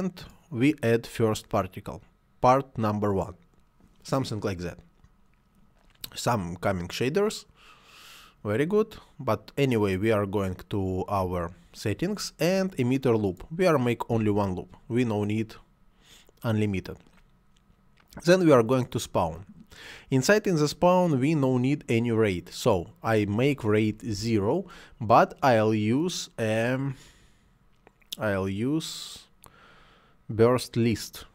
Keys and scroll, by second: 14.0 1, 24.0 0, 24.1 Return.